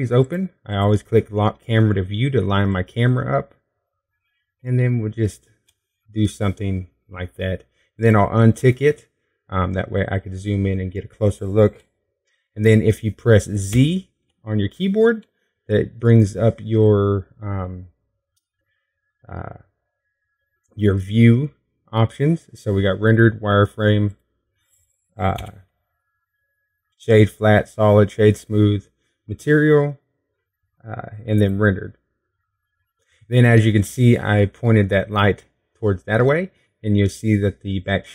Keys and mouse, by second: 1.9 middle click, 2.0-6.2 drag, 6.2 middle click, 6.7-8.8 drag, 8.8-9.8 middle drag, 9.8-11.5 drag, 11.5-13.6 middle drag, 15.5 z, 27.2 z.